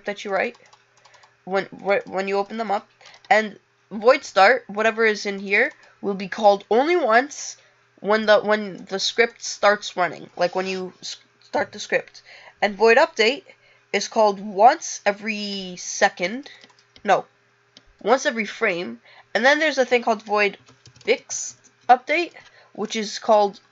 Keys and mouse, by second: 0.0 click.